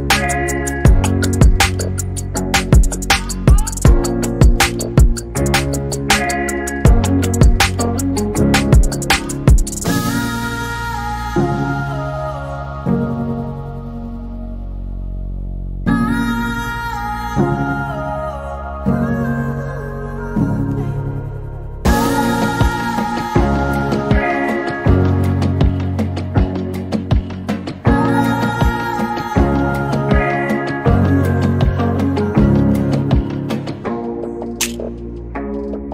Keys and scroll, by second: 0.0-0.8 typing, 5.4-6.5 typing, 11.4 m, 12.6-15.9 typing, 17.4-18.2 typing, 22.7 r, 26.2 space, 29.8-30.5 typing, 32.2 typing, 34.2 r.